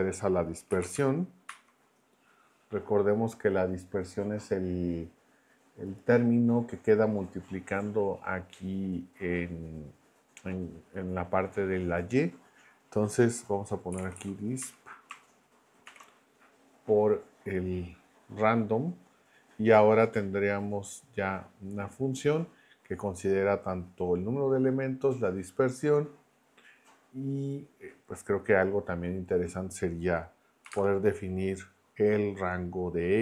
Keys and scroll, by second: 0.0-2.0 typing, 13.7-15.8 typing, 30.6 ', 30.7 space.